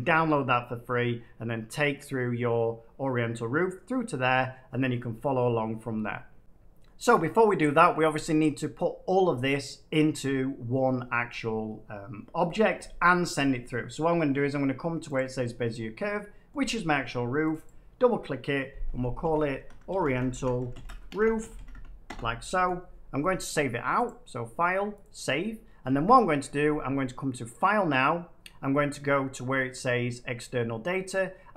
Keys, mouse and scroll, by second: 15.1 click, 17.4 click, 17.6 click, 18.8 click, 19.1-21.6 typing, 22.0 Return, 24.0 click, 27.4 click.